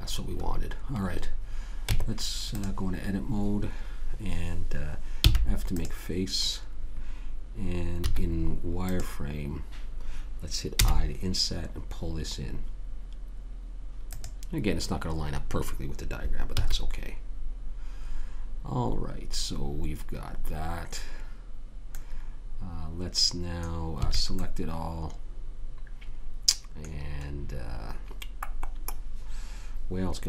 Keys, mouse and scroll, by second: 2.3 Tab, 5.6 f, 6.1 click, 8.4 z, 9.0 middle click, 11.1 i, 16.9 a, 22.3 middle click, 24.4 a.